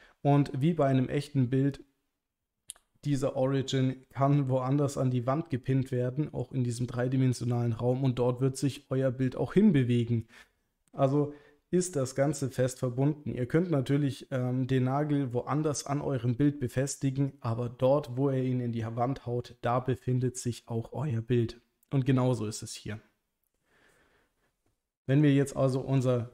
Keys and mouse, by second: 25.1 Tab, 26.0 Tab.